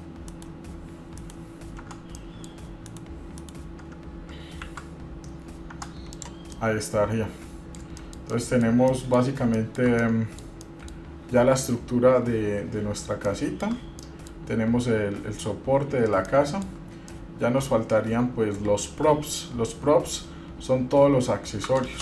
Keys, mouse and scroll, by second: 0.1 middle click, 0.5 KP_Divide, 0.9-1.4 scroll down 1, 1.4 KP_Divide, 2.0 Tab, 2.4-2.7 middle drag, 2.7 scroll down 1, 3.1 KP_Divide, 3.6 KP_Divide, 4.8 shift+z, 5.2 scroll down 2, 5.9 Tab, 6.3 click, 6.7-8.0 middle drag, 8.0 scroll down 1, 8.3 shift+middle click, 8.8 middle click, 9.1 middle click, 9.7 shift+middle click, 10.2 shift+middle click, 10.8 middle click, 11.8-12.2 scroll down 2, 13.5 shift+middle click, 14.2 middle click, 14.9 scroll up 1, 16.4 shift+middle click, 17.3 middle click, 20.3-20.6 scroll up 3, 20.8-21.6 scroll down 1.